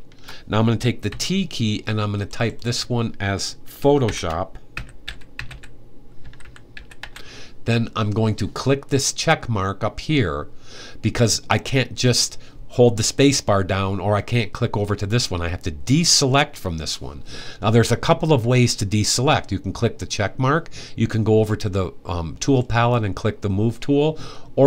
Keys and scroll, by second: 0.8 t, 3.5-7.2 typing.